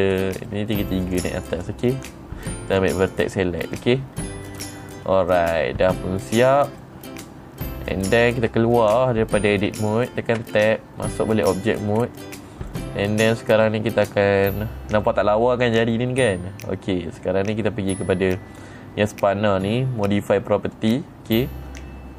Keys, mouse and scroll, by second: 0.3 click, 0.7 middle click, 1.5 click, 2.0 click, 3.2 click, 3.8 middle click, 4.7-5.1 scroll down 1, 5.1 middle click, 6.7-7.0 scroll down 2, 6.7 middle click, 7.3-8.1 scroll down 1, 10.9 Tab, 12.5 middle click, 12.5 scroll down 2, 13.9 middle click, 15.5 middle click, 21.2 click.